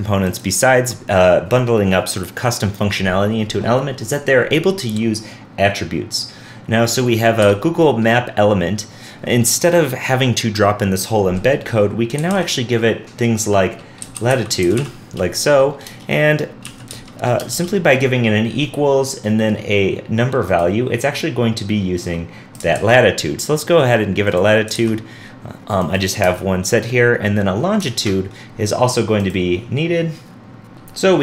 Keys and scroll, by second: 22.8 super+c, 24.8 super+v.